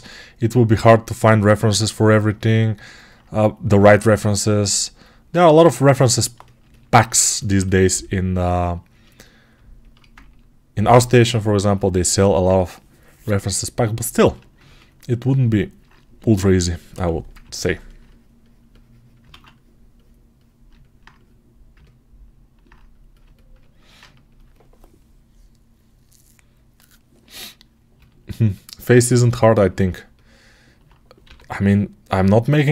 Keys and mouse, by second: 1.7-19.1 shift+right drag, 16.8 6, 19.2 alt+q, 27.8-32.7 alt+right drag, 31.1 g.